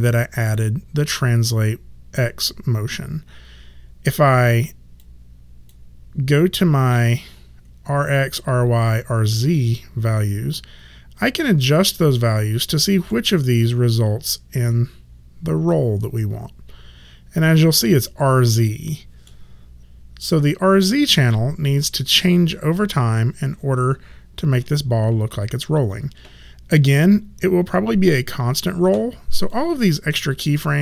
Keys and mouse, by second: 4.9 click, 11.7 click, 29.5 click.